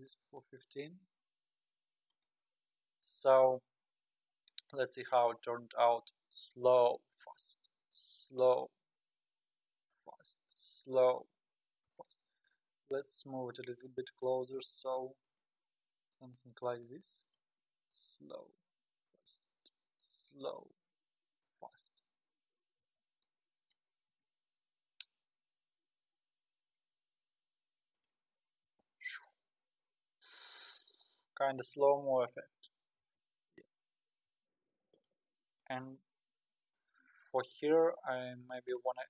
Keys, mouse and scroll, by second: 0.0 click, 0.4 click, 0.8 g, 5.2 space, 13.1-13.7 drag, 13.7 g, 15.3-16.8 drag, 16.8 g, 23.0 space, 23.3-24.1 middle drag, 24.1 KP_0, 25.2 scroll down 2, 28.0 click, 28.6 space, 33.6 click, 34.1 g, 35.6-39.0 drag.